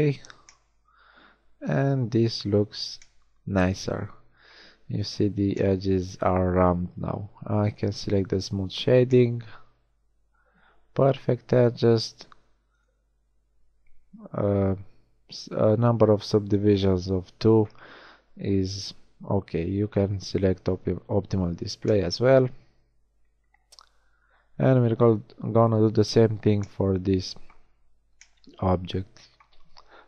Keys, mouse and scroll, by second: 1.9 a, 2.7 Tab, 8.9 middle click, 10.3 middle click, 26.9 drag, 26.9 middle drag, 27.1-28.3 drag, 28.5-28.9 middle drag, 28.9 middle drag.